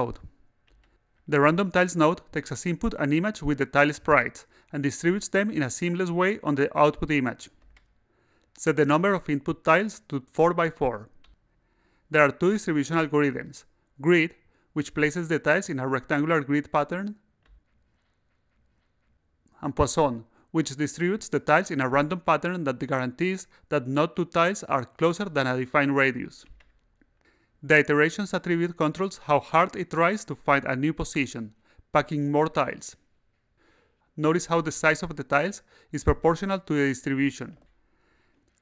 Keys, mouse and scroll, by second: 0.9 click, 8.7 click, 9.7 4, 10.7 click, 11.1 4, 13.0 click, 13.5 click, 14.5 click, 15.1 click, 15.8 click, 17.1 click, 19.2 click, 20.3 click, 22.2-25.6 drag, 27.4-30.4 drag, 34.4 click, 35.4 click, 36.8 click, 38.2 click.